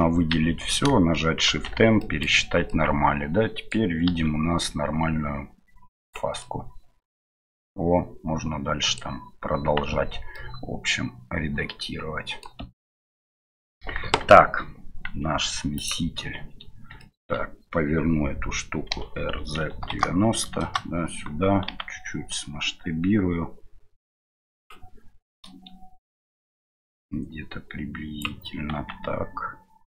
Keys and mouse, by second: 1.5 shift+n, 2.0 middle click, 2.7-3.7 middle drag, 4.0 q, 6.4-9.0 middle drag, 9.9 Tab, 10.3-12.4 middle drag, 13.4 middle click, 14.0 KP_1, 15.7 click, 17.0 shift+middle click, 18.9 r, 26.5-28.2 drag.